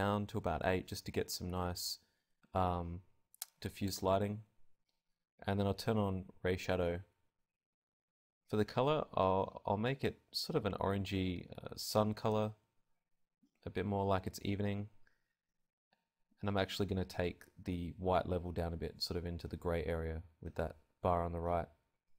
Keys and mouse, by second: 0.1-2.6 middle drag, 2.6-5.6 drag, 5.6-6.6 middle drag, 7.1-11.6 drag.